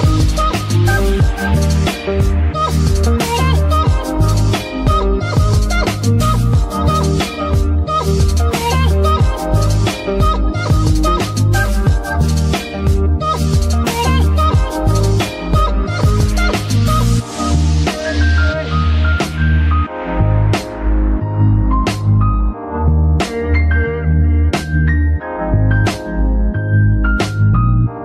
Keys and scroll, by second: 4.2 r, 7.1 Escape, 8.8 ctrl+KP_3, 9.7 r, 12.2 Escape, 13.0 r, 14.6 Escape, 18.7 Escape, 20.9 g, 23.7 Escape.